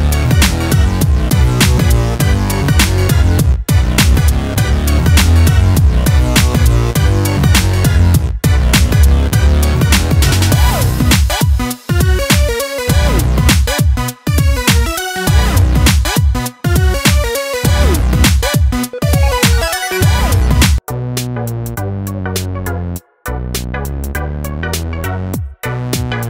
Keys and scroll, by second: 0.2-1.0 typing, 2.6 Return, 3.3-8.2 typing, 8.5 Return, 9.3-10.0 typing, 10.6 Return, 11.7-13.5 typing, 14.9 Return, 15.5-17.1 typing, 19.2 BackSpace, 19.5 BackSpace, 20.8-25.4 typing, 22.3 Return, 24.2 Return.